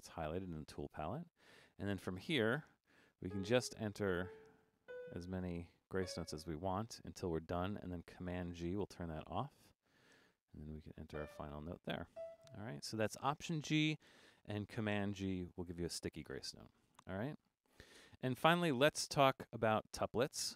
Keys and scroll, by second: 2.5 4, 8.2 super+g, 9.8 5.